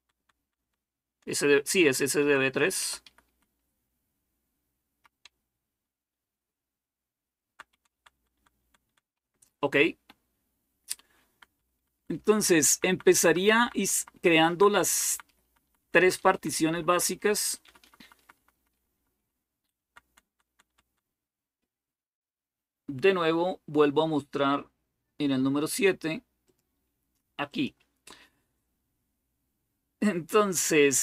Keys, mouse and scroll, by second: 0.0 Down, 0.2 Down, 0.5 Down, 2.0 Down, 2.6 Up, 2.8 Up, 3.1 Up, 3.6-4.8 Up, 5.0 Down, 5.7 Down, 5.7 Down, 5.8 Down, 6.0 Down, 6.2 Down, 6.4 Down, 6.6 Down, 6.8 Down, 7.0 Down, 7.2 Down, 7.4 Down, 7.6 Down, 7.8 Down, 8.0 Down, 8.2 Down, 8.4 Down, 8.6 Down, 8.9 Up, 9.6 Up, 9.8-11.2 Up, 11.3 Up, 11.6 Up, 11.7 Up, 12.0 Up, 12.2 Up, 12.3 Up, 12.3 typing, 12.5 Up, 12.7 Up, 12.8 Up, 13.0 Up, 13.2 Up, 13.5 Up, 13.6 Up, 13.8 Up, 13.9 Up, 14.1 Up, 14.3 Up, 14.6 Up, 14.7 Up, 14.9 Up, 15.1 Up, 15.2 Up, 15.4 Up, 15.6 Up, 15.8 Up, 15.8 typing, 16.0 Up, 16.1 Up, 16.3 Up, 16.5 Up, 16.7 Up, 16.9 Up, 17.1 Up, 17.3 Up, 17.5 Up, 17.7 Up, 17.9 Up, 18.1 Up, 18.3 Up, 18.5 Up, 18.7 Up, 19.1 Up, 19.6 Down, 19.9 Down, 20.1 Down, 20.3 Down, 20.5 Down, 26.4-28.1 drag.